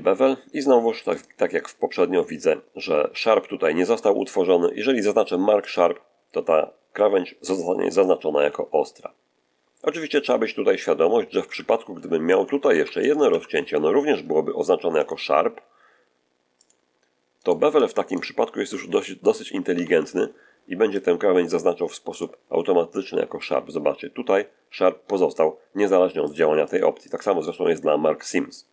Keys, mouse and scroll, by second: 1.0 click, 5.5 click, 8.2 a, 11.4 ctrl+z, 11.8 ctrl+z, 12.5 ctrl+r, 12.9 ctrl+click, 13.2 Escape, 14.9 click, 16.5 click, 17.3 right click, 18.0 shift+right click, 19.6 ctrl+b, 20.8 click, 22.0 click, 22.8 shift+middle click, 26.2 click, 26.4-28.7 scroll up 6, 26.6 click, 27.0 click.